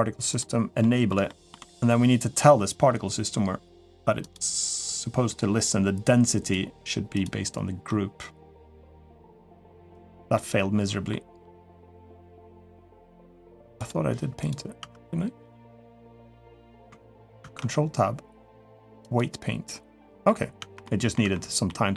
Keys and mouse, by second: 0.1 click, 0.6 middle drag, 1.0 shift+middle drag, 4.0 click, 6.3 click, 7.6-8.8 middle drag, 10.1-10.9 middle drag, 11.9-12.6 middle drag, 13.6 click, 14.6 Tab, 16.2 click, 17.2 ctrl+Tab, 19.8 middle click, 20.4 Tab, 20.6 middle click, 21.0 Tab, 21.4 middle click.